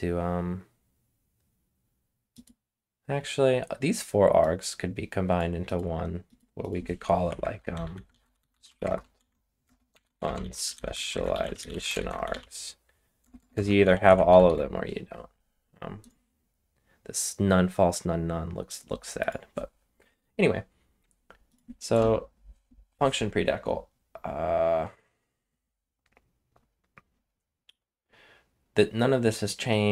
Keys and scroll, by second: 7.2 Escape, 7.4-14.9 typing, 21.9 Return.